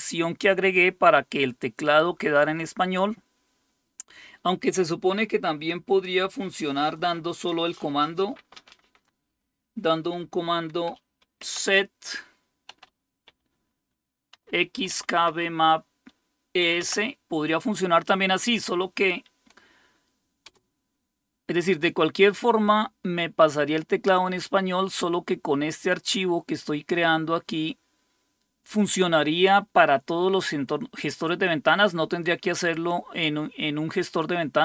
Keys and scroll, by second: 11.4 typing, 12.7-17.1 typing, 20.4 Return.